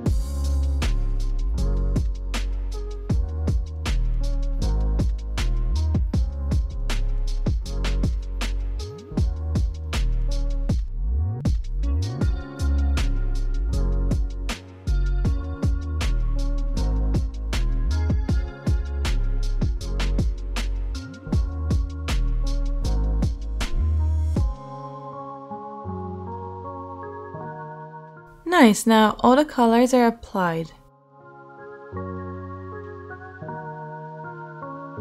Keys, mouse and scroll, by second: 0.1 shift+middle click, 0.4 middle click, 0.8-1.9 middle drag, 1.9 click, 2.7-5.0 right drag, 5.0 middle click, 5.1-13.5 right drag, 9.2 l, 10.4 l, 13.2 l, 13.5-15.1 shift+middle drag, 14.5 l, 15.1 shift+right click, 15.2 shift+middle click, 15.3 shift+right click, 15.4 shift+middle click, 15.5 right click, 15.6-18.3 drag, 16.9 shift+middle click, 17.4 l, 17.8 l, 18.3 shift+middle click, 18.4-22.6 drag, 18.7 l, 22.6-23.9 middle drag, 23.9 click, 23.9 right click, 24.2 shift+middle click, 24.4 shift+click, 24.4 shift+right click, 24.6-26.3 shift+middle drag, 26.8-30.9 drag, 29.6 Tab.